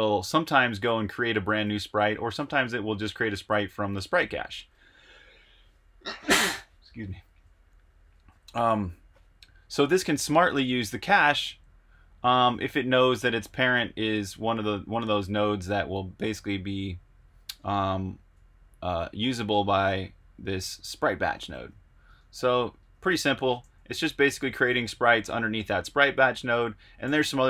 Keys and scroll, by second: 1.3 Escape, 1.5 j, 2.3 shift+v, 6.4 j, 8.0 Escape, 9.8 k, 12.7 shift+v, 15.3 super+Tab, 17.5 super+Tab, 21.2 super+Tab, 22.0 super+Tab, 23.6-25.3 typing, 24.1 Escape, 26.8-27.4 typing.